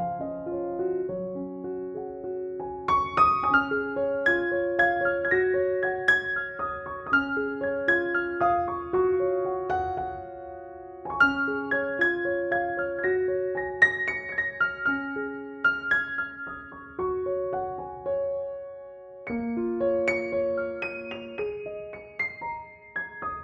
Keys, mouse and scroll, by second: 14.4-15.5 drag, 16.9 ctrl+=, 17.6 [, 17.8 [, 18.2-19.6 drag, 19.7 ctrl+shift+f, 20.6 click, 21.7 ctrl+-, 22.6 ctrl+click, 22.8 ctrl+e.